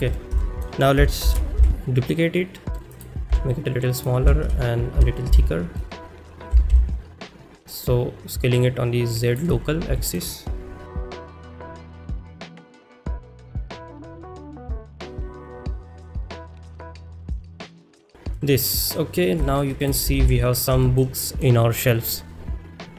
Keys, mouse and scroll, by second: 0.5 shift+middle click, 1.4 shift+d, 1.6 x, 4.0 click, 4.0 s, 9.3 click, 10.0 shift+middle drag, 11.0-12.3 typing, 11.4 click, 11.5 shift+middle click, 11.9 click, 12.1 click, 13.1 shift+middle click, 13.3-18.1 typing, 13.6 click, 13.8 shift+middle click, 14.6 shift+middle click, 14.7 shift+middle click, 15.2 click, 15.2 click, 15.3 shift+middle click, 15.4 shift+middle click, 16.0 click, 16.1 shift+middle click, 16.4 click, 16.7 shift+click, 16.8 shift+middle click, 17.0 shift+middle click, 17.6 click, 17.7 shift+middle click, 18.1 click, 18.9 middle drag, 19.4 shift+middle drag, 19.9 click, 20.8 ctrl+shift+s, 20.8 middle drag, 21.2 middle click.